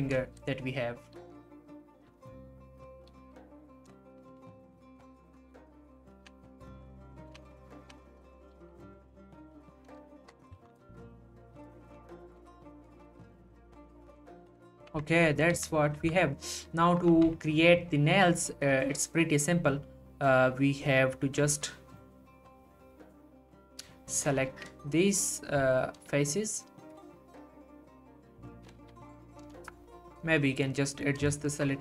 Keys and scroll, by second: 1.2 g, 3.1 g, 8.5 g, 10.6 ctrl+z, 11.9 ctrl+z, 13.0 g, 14.4 z, 14.9 Tab, 15.5 z, 17.1 Tab.